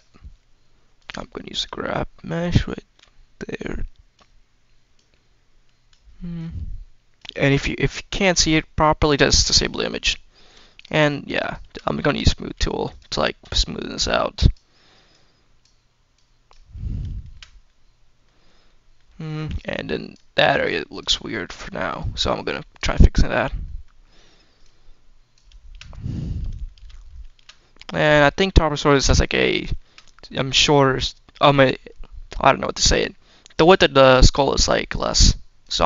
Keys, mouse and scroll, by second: 0.8 click, 1.2 shift+middle click, 2.3-4.0 drag, 4.8 click, 6.2 click, 7.3-8.3 scroll down 2, 8.3 scroll down 1, 9.4 click, 9.9-10.4 scroll up 2, 10.6 shift+click, 11.2 shift+click, 12.7 shift+click, 13.8 click, 15.0 click, 16.0 click, 16.6-17.0 scroll down 2, 17.0 shift+middle click, 17.5 middle click, 18.1-18.5 scroll up 2, 18.5 middle click, 19.4 click, 20.4 click, 21.1 middle click, 21.8 click, 22.8 middle click, 23.0-23.4 scroll down 2, 23.5 middle click, 24.5 click, 25.8 scroll down 1, 25.9 middle click, 26.5 shift+middle click, 26.8 scroll up 2, 27.1 shift+middle click, 27.4 middle click, 28.0 scroll down 1, 28.2 middle click, 28.8 shift+middle click, 29.1 middle click, 29.6 shift+middle click, 30.0 middle click, 34.8 click.